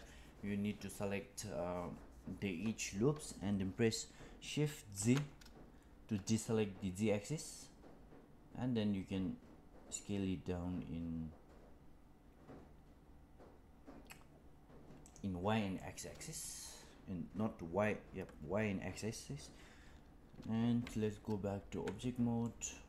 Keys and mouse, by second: 15.7 middle click, 20.7 z, 22.3-22.8 middle drag.